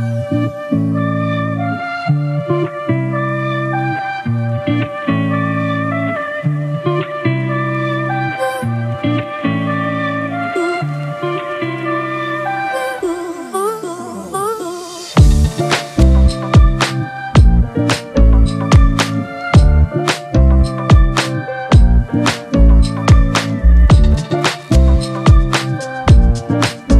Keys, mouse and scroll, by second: 6.5-7.5 typing, 7.5 double click, 13.1 ctrl+click, 14.6 ctrl+click, 17.6 ctrl+click, 24.4 Return, 26.3 double click.